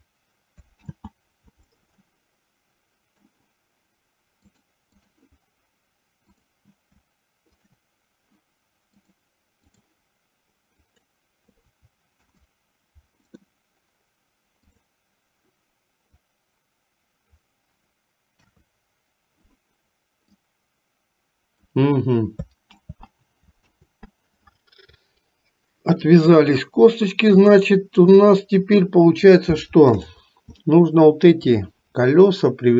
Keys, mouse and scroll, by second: 1.0 ctrl+z, 2.2-3.4 middle drag, 4.6 click, 6.4 click, 7.7 shift+click, 9.1 click, 10.8 click, 12.3 ctrl+p, 14.7 click, 16.5-17.7 drag, 18.5 KP_3, 20.6-21.9 drag, 22.9 ctrl+z, 23.9 ctrl+z, 27.7 click, 30.1 shift+click, 30.9 shift+middle click.